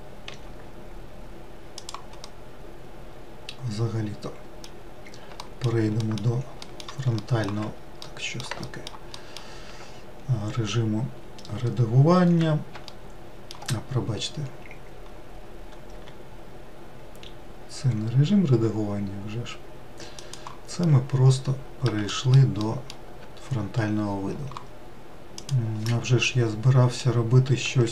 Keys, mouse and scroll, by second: 0.3 r, 2.2-5.3 middle drag, 5.4 alt+middle click, 6.0 alt+middle click, 6.6 alt+middle click, 7.1 alt+scroll up 1, 7.3 alt+middle click, 8.0 middle click, 11.3-12.2 scroll up 1, 12.9-13.9 shift+middle drag, 13.9-14.4 scroll up 2, 15.9 r, 20.8-22.1 middle drag, 22.6 alt+middle click, 26.3-27.9 middle drag.